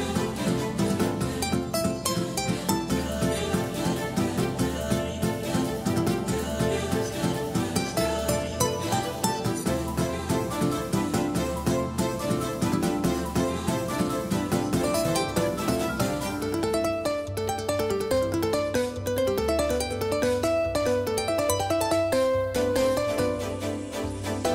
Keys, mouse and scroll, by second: 21.4 shift+d.